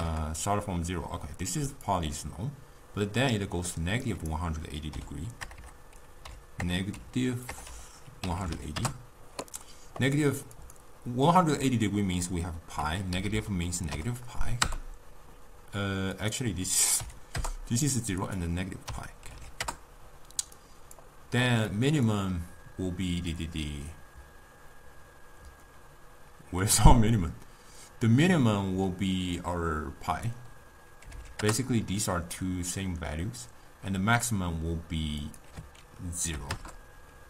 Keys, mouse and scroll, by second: 5.6 BackSpace, 10.6-13.3 drag, 13.3 Left, 16.2-20.7 drag, 21.7 click, 30.1-33.2 drag, 35.3-37.2 drag.